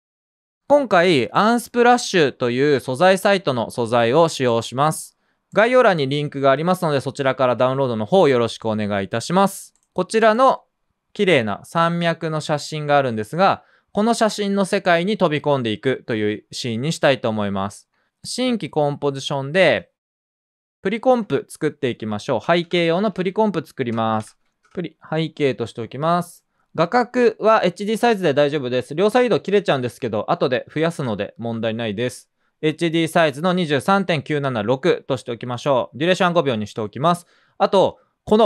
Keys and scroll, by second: 21.5-23.8 typing.